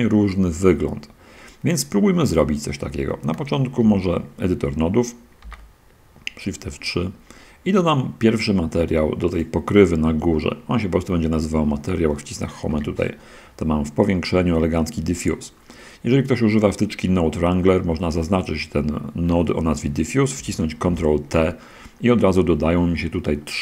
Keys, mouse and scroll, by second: 2.3 click, 3.7 shift+F3, 5.5 n, 6.3 middle drag, 6.5 scroll down 2, 7.1-7.4 scroll up 1, 12.7 Home, 15.4 scroll down 2, 16.4 middle click, 18.5 click, 19.5 middle click, 21.1 ctrl+t.